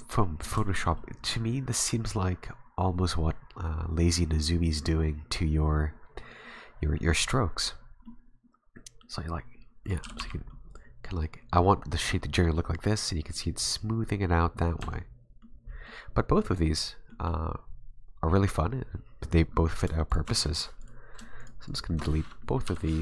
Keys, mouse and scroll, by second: 0.7 shift+middle click, 7.8 scroll down 3, 8.0 middle click, 9.9 right click, 10.0 g, 14.8 Tab, 15.4 middle click, 17.1 middle click, 20.1 shift+right click, 20.8 right click, 21.4 shift+right click, 21.7 shift+right click, 22.4 middle click, 22.6 Delete, 22.9 middle click.